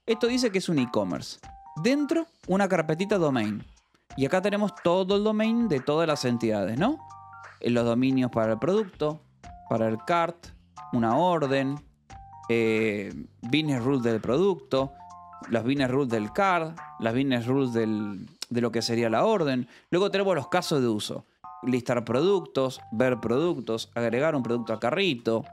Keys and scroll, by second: 0.3 shift+v, 1.1 Escape, 1.3 j, 1.6 v, 2.8 shift+v, 3.6 Escape, 4.2 j, 4.9 j, 6.2 Escape, 6.4 k, 7.6-10.1 typing, 9.8 Escape, 11.0 Escape, 11.1 j, 12.1 shift+v, 14.0 Escape, 14.4 j, 15.2 shift+v, 15.6 Escape, 16.1 j, 17.0 shift+v, 18.1 Escape, 19.2 Escape, 19.7 j, 20.5 Escape, 20.7 j, 21.6 shift+v, 21.8 Escape, 21.9 j, 22.8 Escape, 23.0 j, 23.9 Escape, 24.8-25.5 typing.